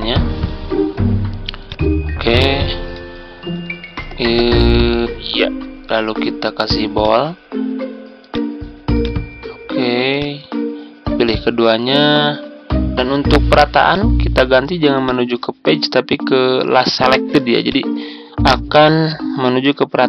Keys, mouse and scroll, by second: 0.5-1.5 ctrl+scroll down 1, 1.6 ctrl+click, 3.3-4.3 ctrl+scroll up 1, 4.3-10.5 drag, 11.1 shift+click, 13.8 click.